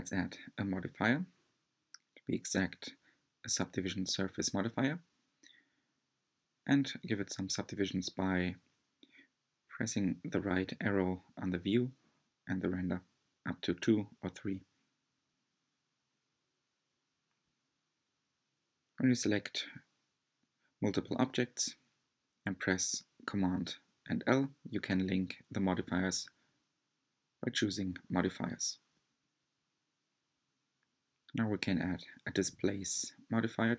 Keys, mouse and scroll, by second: 2.6-5.7 drag, 5.7-6.3 scroll up 5, 6.9-7.2 scroll down 2, 8.6-14.7 drag, 19.5-20.0 scroll up 1, 20.4 scroll up 1, 20.9-24.0 middle drag, 24.6 scroll down 1, 25.3-26.3 drag, 32.6-33.7 drag.